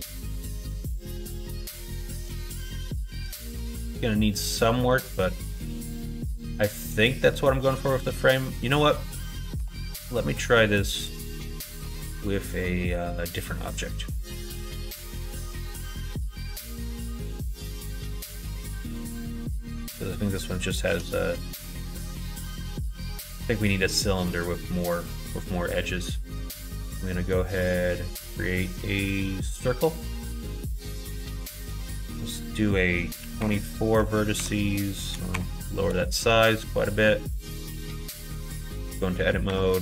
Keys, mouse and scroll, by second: 0.5-3.2 middle drag, 3.7 middle click, 4.7 middle click, 5.3 middle click, 5.9 middle click, 6.5 middle click, 7.0 middle click, 8.2 middle click, 11.4-12.6 middle drag, 13.1-14.6 middle drag, 15.2 KP_1, 15.7 KP_3, 17.0 click, 20.8 shift+a, 23.0 shift+a, 32.0-36.4 drag, 38.7 Tab, 39.5 1.